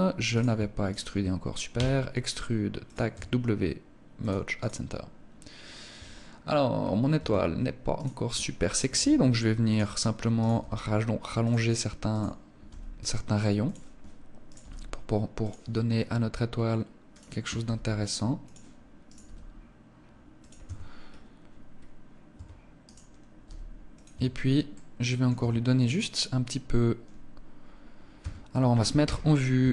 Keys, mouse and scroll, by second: 0.3 shift+right click, 1.2 e, 2.3 click, 2.5 w, 5.0-6.2 scroll down 2, 5.4 Tab, 6.2-6.8 scroll up 2, 6.6 Tab, 7.4 right click, 8.3 g, 9.2 click, 9.8 right click, 10.0 g, 10.9 click, 11.5 right click, 12.1 g, 13.9 right click, 14.0 g, 14.9 click, 16.5 right click, 17.0 g, 17.9 click, 18.5 right click, 18.6 g, 19.9 click, 20.0 Tab, 20.4 scroll down 3, 21.2-21.5 scroll up 2, 21.8 Tab, 22.2 right click, 22.8 g, 23.4 click, 23.5 Tab, 24.1 middle click, 24.8 Tab, 25.3 right click, 27.6 Tab, 28.4 KP_1, 29.0 Tab, 29.5 a.